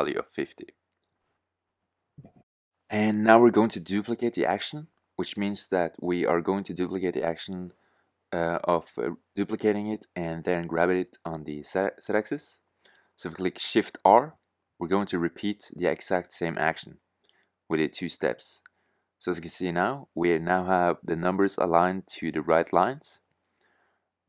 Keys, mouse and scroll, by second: 4.9-6.2 middle drag, 10.3-12.7 middle drag, 13.8-16.0 typing, 17.3 shift+r.